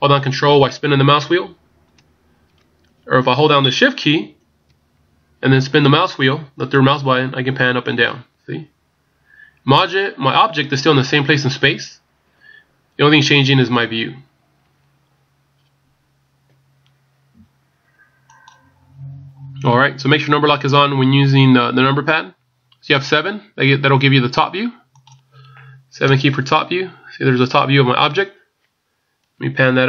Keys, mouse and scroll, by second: 0.0 ctrl+scroll down 2, 0.4 ctrl+scroll up 1, 0.9-1.2 ctrl+scroll down 5, 1.5 ctrl+scroll up 1, 6.4-7.4 shift+scroll down 6, 7.4 shift+scroll up 1, 8.2 shift+scroll down 1, 8.4-8.9 shift+scroll down 5, 8.9 shift+scroll up 1, 9.7 shift+scroll down 1, 9.8-10.2 shift+scroll down 4, 10.9-11.5 shift+scroll down 4, 11.5 shift+scroll up 1, 13.5 ctrl+scroll down 3, 13.9 ctrl+scroll up 1, 14.7 ctrl+scroll up 5, 25.1 click, 26.0 KP_7, 29.5-29.8 ctrl+scroll down 2.